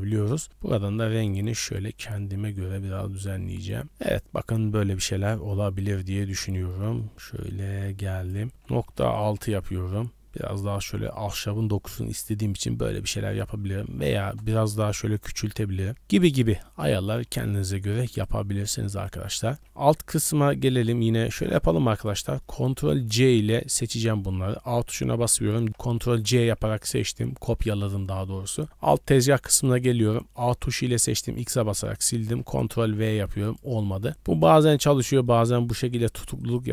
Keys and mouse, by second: 3.8 middle drag, 4.6-5.1 middle drag, 5.8 middle click, 6.5 middle click, 6.9 middle click, 7.3 middle click, 8.1-9.4 drag, 10.6 middle drag, 11.1 middle click, 11.9 middle click, 13.2-14.3 drag, 15.9-16.2 middle drag, 16.5 middle drag, 17.5 shift+drag, 18.1 click, 18.9 click, 19.4 middle click, 20.2 Tab, 21.9 click, 22.5 middle click, 22.7 a, 26.1 ctrl+c, 29.1 middle click, 29.4 click, 30.0 a, 30.2 a, 30.7 a, 31.3 x, 32.2 ctrl+v, 33.4 click, 34.1 ctrl+c, 34.1 click, 34.5 ctrl+v, 35.2 click, 36.4 click.